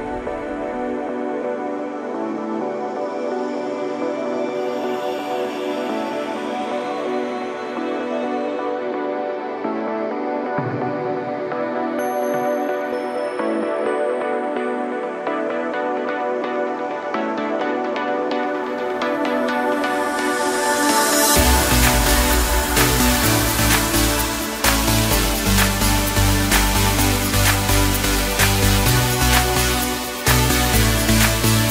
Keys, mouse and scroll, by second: 0.1 scroll up 2, 0.7 s, 3.0 ctrl+KP_7, 3.8 KP_Decimal, 5.3-5.8 drag, 5.8-6.5 scroll down 2, 6.5 g, 12.6 s, 14.1 KP_1, 15.3 h, 24.2-24.5 scroll down 3, 24.5-26.1 middle drag, 26.1-26.8 scroll down 1, 26.8-27.2 drag, 27.2-28.3 middle drag, 28.3 ctrl+a, 30.4 middle click, 30.8-31.7 scroll up 1.